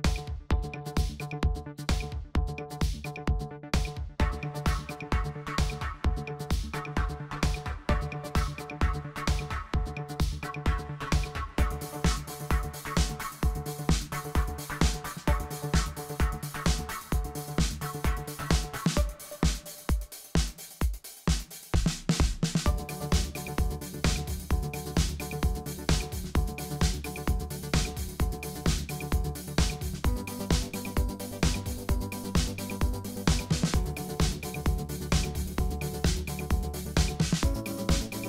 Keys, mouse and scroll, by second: 0.1-1.6 drag, 1.8-2.2 middle drag, 2.2-2.5 scroll up 2, 2.5 click, 5.0 click, 6.0 click, 6.8 click, 8.5 click, 10.2-11.9 drag, 13.1 click, 13.5 click, 15.2 click, 17.4 click, 17.6 g, 18.5 click, 18.6 g, 19.2 click, 19.5 g, 21.2 KP_1, 21.8 g, 22.9-24.1 middle drag, 24.1 click, 25.2 click, 26.8-27.7 shift+middle drag, 27.7 click, 28.2 click, 29.4 click, 30.4 middle click, 30.7 click, 31.2 r, 34.2 click, 34.9 click, 35.8 click.